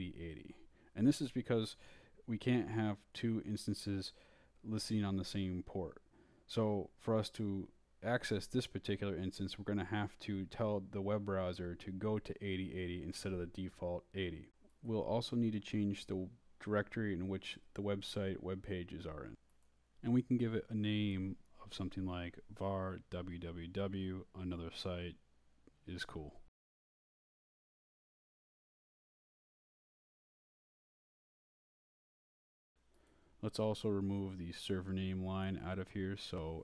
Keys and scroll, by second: 3.4 Left, 5.2-6.1 typing, 6.3 Down, 6.7 Left, 8.4 d, 9.6 ⟲, 10.3 d, 11.2 Down, 11.8 Up, 12.0 Right, 14.2 Left, 22.3-25.4 typing, 27.2-31.1 typing, 33.2 Down.